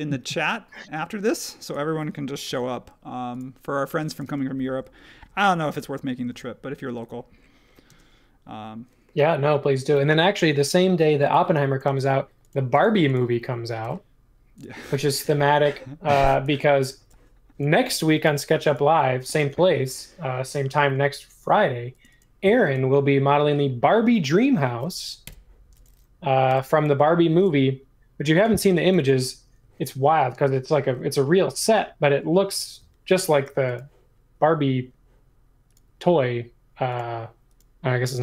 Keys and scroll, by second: 2.5 m, 4.2 space, 6.3 super+1, 7.9 space, 9.6 space, 11.3 e, 11.8 space, 13.8 m, 15.2 space, 18.2 m, 19.4 space, 20.6 space, 25.2 BackSpace, 26.5 m, 28.6 space.